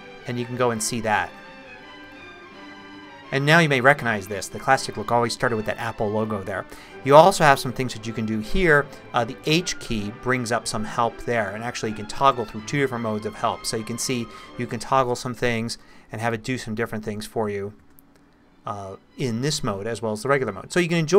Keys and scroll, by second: 9.5 h, 11.7 h, 16.1 h, 17.8 h.